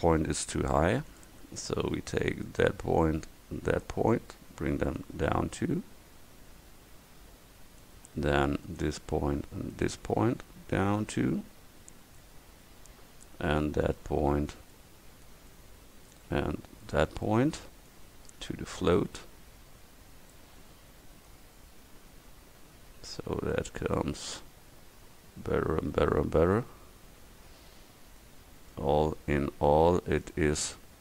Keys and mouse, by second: 1.2-2.5 drag, 7.9 click, 12.2-13.4 drag, 16.9-19.0 right drag, 19.0-20.3 middle drag, 20.9 Tab, 24.5-25.3 middle drag.